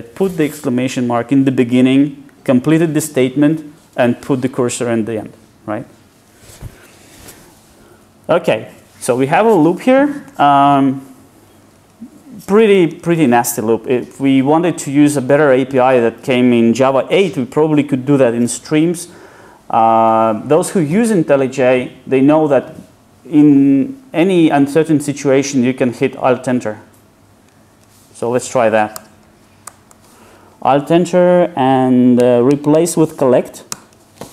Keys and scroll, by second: 29.7 alt+Return.